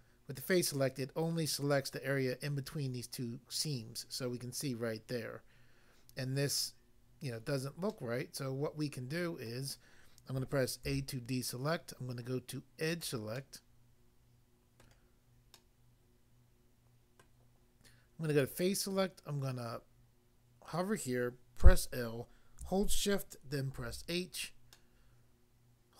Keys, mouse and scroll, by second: 8.0 middle click, 9.4 middle click, 10.9 a, 12.9 click, 13.0 click, 13.4 middle click, 14.8 middle click, 15.5 middle click, 17.2 middle click, 18.3 click, 18.4 click, 21.6 i, 23.7 h, 24.7 middle click.